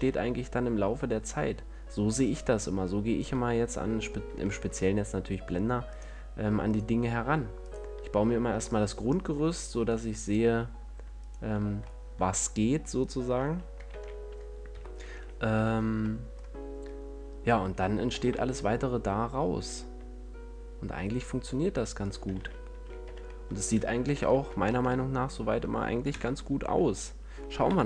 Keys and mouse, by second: 3.5-6.2 drag, 6.2-13.3 middle drag, 14.2 ctrl+l, 15.0 KP_1, 18.4 shift+d, 22.4-24.1 drag, 22.7 a, 23.3 z, 24.1 middle click, 24.3 z, 24.6 a, 25.0 Tab, 26.4 KP_0.